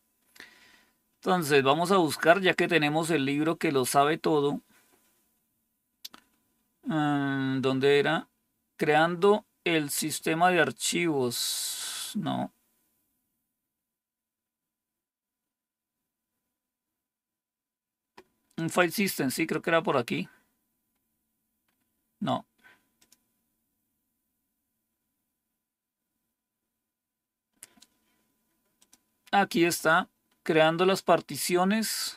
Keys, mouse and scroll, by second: 1.5 click, 3.6-6.2 scroll down 2, 6.2-7.1 scroll down 1, 7.1-8.1 scroll down 1, 12.8-18.6 scroll down 1, 18.6 click, 20.8-22.9 scroll down 1, 22.9 click, 24.8-27.9 scroll down 2, 27.9-28.7 scroll down 1, 28.7 click, 30.5-31.2 scroll down 2, 31.2-32.0 scroll down 1, 32.0 scroll down 1.